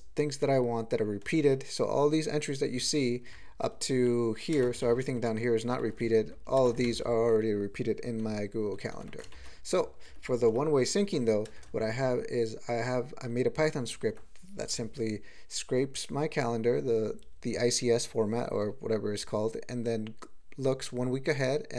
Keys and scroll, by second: 3.3-4.1 ctrl+n, 4.5 ctrl+space, 4.8 alt+shift+., 5.8 ctrl+g, 6.0 ctrl+p, 6.2 ctrl+p, 6.3 ctrl+p, 6.6 ctrl+space, 6.9 alt+shift+,, 8.9 ctrl+g, 9.3 alt+shift+., 10.1 ctrl+p, 11.5 ctrl+space, 11.6 ctrl+e, 13.9 ctrl+g.